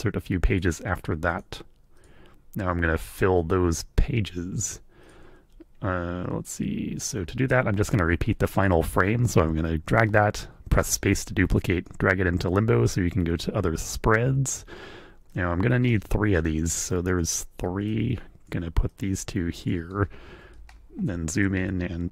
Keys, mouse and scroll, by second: 0.5 click, 1.3 scroll up 1, 2.0 click, 5.0 click, 8.6 click, 10.1-12.1 drag, 10.8 space, 15.3-17.4 drag, 15.9 space, 16.3 space, 17.9 click, 18.9-19.9 drag, 20.7 ctrl+middle click, 21.4-22.1 drag.